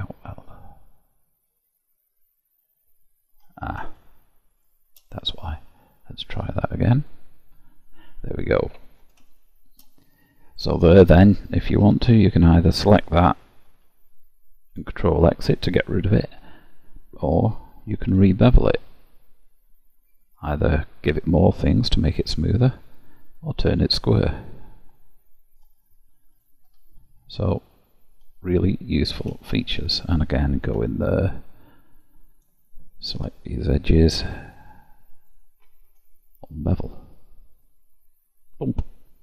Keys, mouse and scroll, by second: 4.6 shift+click, 5.2 middle click, 7.1 click, 8.3 middle click, 9.4 shift+middle click, 10.3 scroll up 1, 11.9 2, 13.0 alt+click, 14.7 ctrl+x, 16.2 ctrl+z, 18.0 ctrl+b, 25.0 middle click, 26.4 click, 26.7 Tab, 27.4 middle click, 28.9-29.4 scroll down 3, 29.5 shift+middle click, 30.7 Tab, 31.1-32.0 scroll up 2, 32.5 click, 33.2 shift+click, 34.2 click, 35.3 shift+click, 36.5 click, 37.2 click, 37.7 middle click.